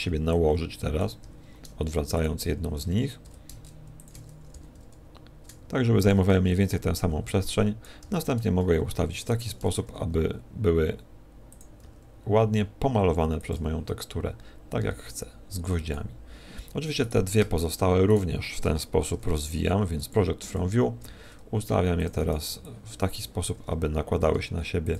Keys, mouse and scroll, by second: 1.0 b, 1.2 r, 3.2 ctrl+click, 4.5 ctrl+click, 4.5 g, 6.5 shift+click, 6.5 a, 7.8 b, 8.0 r, 9.9 ctrl+click, 9.9 g, 11.8 s, 13.5 click, 13.5 g, 16.5 click, 17.0 right click, 18.1 shift+right click, 19.1 u, 21.0 g, 22.2 click, 22.2 a, 23.2 b, 23.5 r.